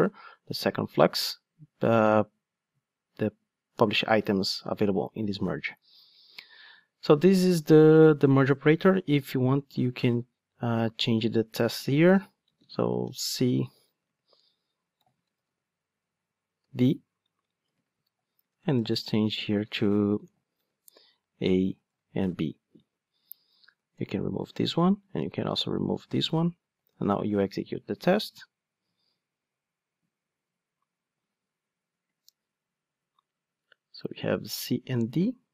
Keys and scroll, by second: 23.9 super+/, 26.8 ctrl+shift+d.